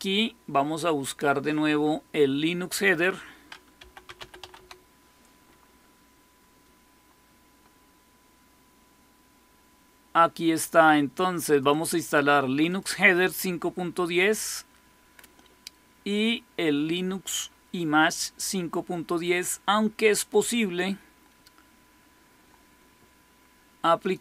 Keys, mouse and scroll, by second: 2.7 click, 3.4-4.9 typing, 11.4 click, 11.6 click, 12.6 click, 20.1 click, 20.3 click, 23.9 click.